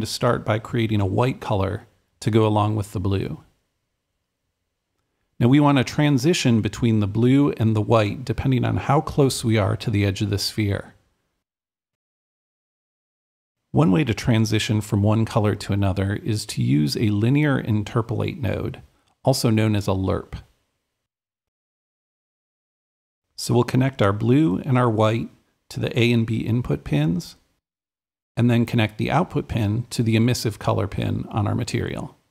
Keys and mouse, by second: 0.0-1.5 right drag, 1.6-2.6 right drag, 2.7 click, 4.4-5.9 drag, 6.2-7.9 drag, 9.8-11.5 drag, 11.5-13.5 drag, 14.6-15.9 alt+drag, 17.1-19.2 drag, 18.4-19.3 typing, 21.8-32.3 drag.